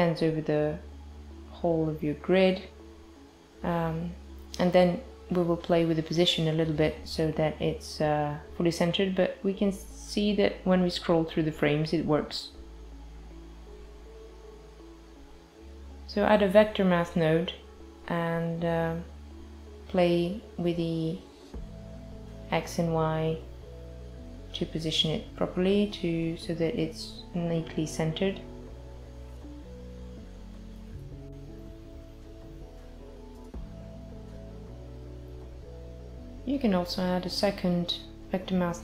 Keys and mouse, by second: 0.0 click, 1.6 click, 2.0 click, 6.9 click, 13.0 click, 13.4 click, 13.7 shift+a, 18.2 click, 21.4 click, 22.9 space, 23.2 space, 24.2 click, 29.2 click, 35.6 click, 36.4 shift+d, 37.8 click.